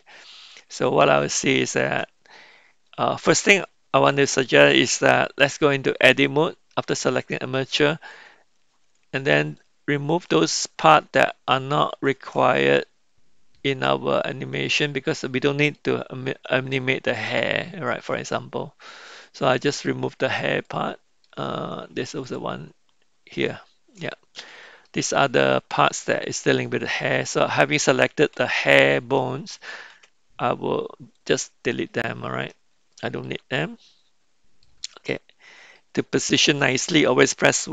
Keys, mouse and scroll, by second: 1.5 shift+middle click, 6.7 Tab, 8.0 click, 9.7 shift+click, 11.2 shift+click, 12.7-15.8 middle drag, 16.7 shift+middle click, 17.4-19.8 middle drag, 20.6 middle click, 22.2 shift+click, 24.0 middle click, 24.6 middle click, 25.5 middle click, 29.9 x, 33.0 shift+middle click, 33.5-34.6 middle drag, 37.6 KP_1.